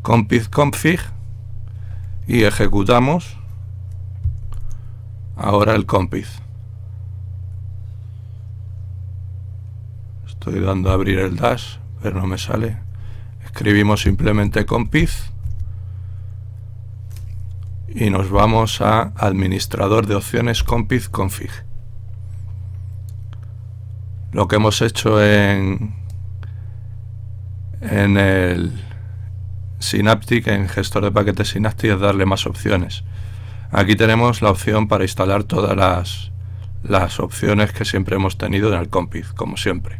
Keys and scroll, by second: 14.0-15.8 typing, 19.7 Down, 20.8 Return.